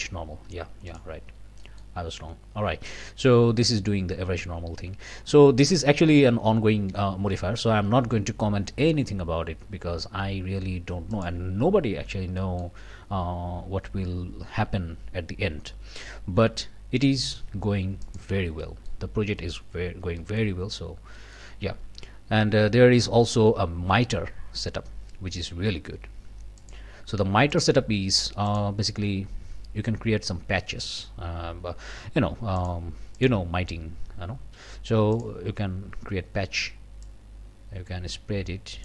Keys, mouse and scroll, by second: 0.2 scroll down 1, 0.9 click, 1.6 click, 2.0-2.3 scroll up 1, 11.1 click, 12.0 scroll up 1, 12.4 click, 18.0 click, 18.6 middle click, 19.1 scroll down 1, 19.4 middle click, 19.8 scroll up 1, 20.2 middle click, 20.7 scroll down 1, 21.1 middle click, 26.6 click, 27.5 click, 28.5 click, 32.6 click, 33.2 click, 35.1 click, 37.0-38.8 drag.